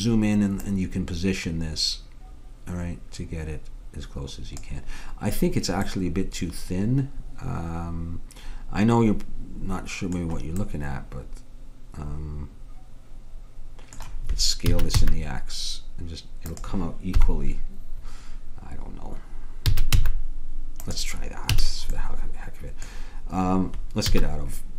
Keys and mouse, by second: 0.7-2.6 drag, 5.9-8.0 middle drag, 10.7-12.1 middle drag, 14.7 s, 17.2 KP_1, 19.7 s, 21.6 a, 24.1 z.